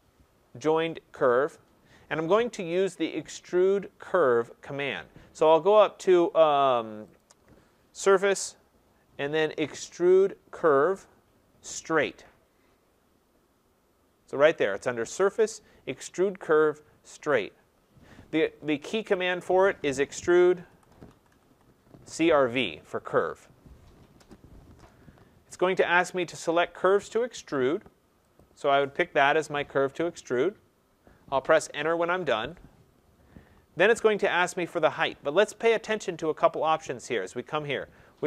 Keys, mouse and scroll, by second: 4.9 click, 7.1 click, 19.2 click, 20.1-21.5 typing, 21.3-26.5 drag, 24.1 Return, 28.3-34.3 drag, 32.3 Return, 34.3 Return.